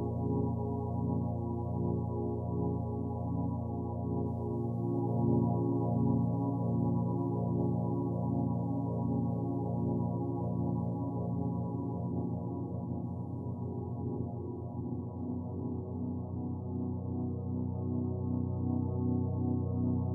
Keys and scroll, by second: 3.0 Return, 4.0 ctrl+z.